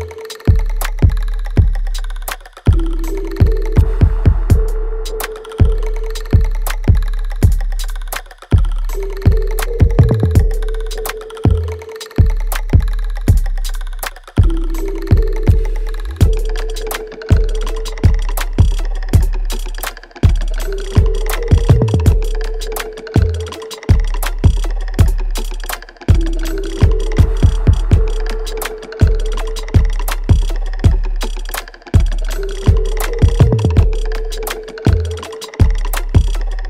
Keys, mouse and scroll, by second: 0.8 g, 1.9-4.0 drag, 4.0 click, 4.5 g, 5.3 click, 5.9 g, 6.3 scroll down 1, 6.8 alt+right click, 7.2 alt+click, 8.2 alt+right click, 9.3-10.8 drag, 10.8 g, 11.6 click, 12.2 g, 13.1 click, 13.7 g, 15.5 click, 15.5 click, 16.1 g, 16.4-16.7 scroll down 1, 16.8 click, 17.5 alt+middle click, 17.8-19.2 alt+right drag, 19.2-23.9 drag, 23.9 g, 24.6 click, 25.6 g, 26.6-28.3 alt+middle drag, 28.3 alt+right click, 28.8 alt+click, 29.4-30.9 alt+middle drag, 30.9-32.3 drag, 32.3 g, 33.4 click, 34.2 g, 35.4 click, 35.9 g, 36.3-36.6 scroll down 1.